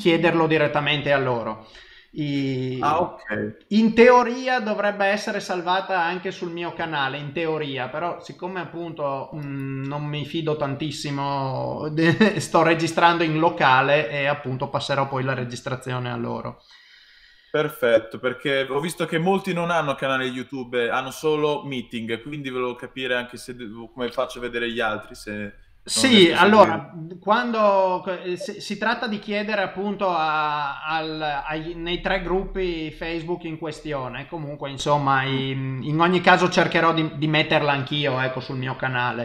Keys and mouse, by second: 1.2 middle click, 19.4 middle click, 24.5 middle click, 26.7 middle click, 30.4 middle click, 32.0 middle click, 35.5 middle click, 36.4 middle click.